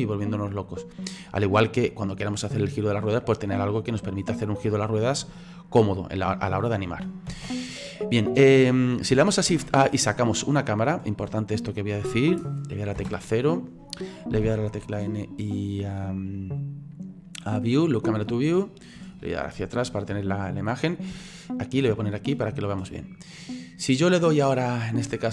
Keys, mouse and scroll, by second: 3.4-7.3 drag, 7.3 ctrl+z, 8.2-9.5 middle drag, 9.5 shift+a, 11.5-13.0 scroll down 4, 13.0 KP_0, 14.5 n, 17.1 click, 18.0 click, 18.5-20.2 scroll down 28, 20.2-20.7 shift+middle drag, 20.7-21.2 scroll up 5, 21.2-25.3 shift+middle drag.